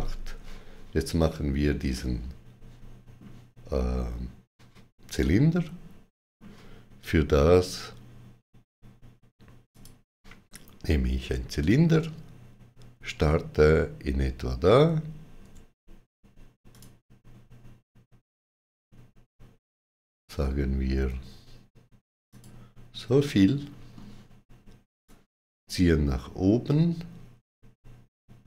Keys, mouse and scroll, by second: 1.8 middle click, 1.8 x, 5.0 middle click, 9.5 middle click, 9.5 click, 15.3 click, 15.3 middle click, 16.5 click, 22.1 click, 23.1 middle click, 24.9 click.